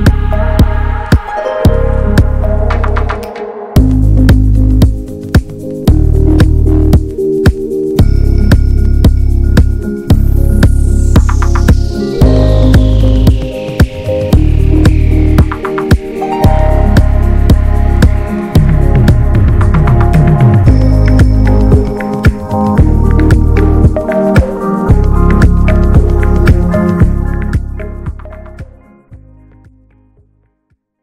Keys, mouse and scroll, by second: 0.0-1.1 middle drag, 1.1 drag, 1.4 middle click, 1.7 Tab, 2.0 middle click, 2.2 scroll up 1, 2.8 click, 3.1 scroll up 1, 3.9 click, 4.4 alt+shift+click, 4.6 alt+shift+click, 5.1 alt+shift+click, 5.3 middle click, 6.2 alt+shift+click, 6.7 alt+shift+click, 7.6 alt+shift+click, 8.7 x, 9.1 middle click, 9.4 scroll down 2, 9.6 middle click, 10.0 scroll up 1, 10.2 Tab, 10.4 middle drag, 10.6 scroll up 1, 10.7-11.2 scroll down 1, 11.2 click, 12.7 click, 12.8 scroll down 2, 13.0-13.6 middle drag, 13.6 click, 14.1 middle click, 14.3 Tab, 14.6 middle click, 15.0 Tab, 15.3-16.0 middle drag, 16.0-16.4 drag, 16.4 scroll down 1, 16.6-17.9 middle drag, 17.9 scroll down 1, 18.1-19.4 shift+middle drag, 19.4-19.8 drag, 19.8-21.8 middle drag, 21.8-22.7 drag, 22.7 scroll down 2, 22.9-23.6 middle drag, 23.6-24.9 drag, 24.9 shift+middle click, 25.9 drag, 26.2-26.5 shift+middle drag, 26.5 click, 26.7-28.0 middle drag, 28.0 scroll up 2, 28.3-31.0 shift+middle drag.